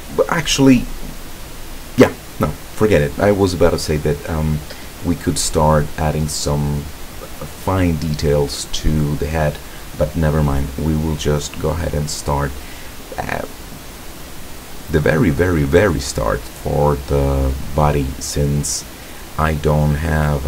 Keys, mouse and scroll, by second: 15.4-17.3 drag.